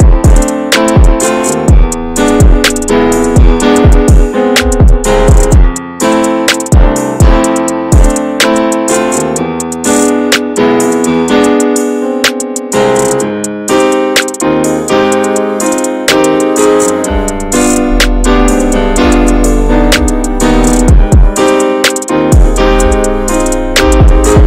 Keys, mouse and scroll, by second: 0.0 click, 0.9 s, 1.8 ctrl+b, 7.6-7.9 scroll up 1, 7.9 middle click, 8.7 click, 9.2-10.7 drag, 10.7-11.7 shift+middle drag, 11.7-13.5 drag, 13.7-16.3 drag, 16.3-17.5 shift+middle drag, 17.5 scroll down 3, 17.7 Tab, 17.9 drag, 18.3 scroll down 3, 18.3-18.7 shift+middle drag, 18.7-19.1 scroll up 3, 18.9 middle click, 19.1 Tab, 19.4 shift+middle click, 19.6-20.1 scroll up 6, 20.1 shift+middle click, 20.7 3, 20.9 click, 21.2 shift+middle click, 21.5 s, 23.0-24.3 alt+middle drag, 24.3 e.